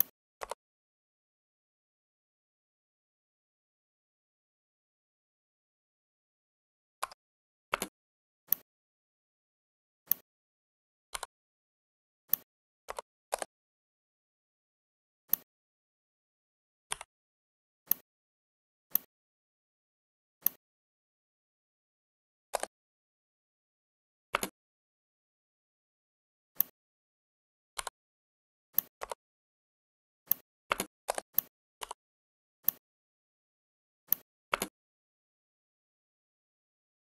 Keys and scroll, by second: 6.9 Escape, 7.6 space, 24.3 space, 30.6 space, 34.5 space.